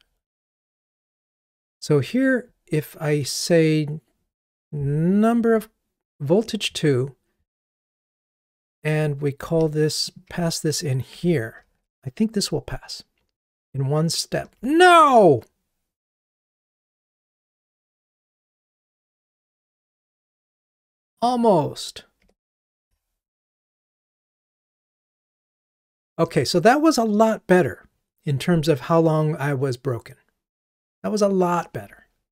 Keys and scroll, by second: 11.9 ctrl+r, 22.9 ctrl+r.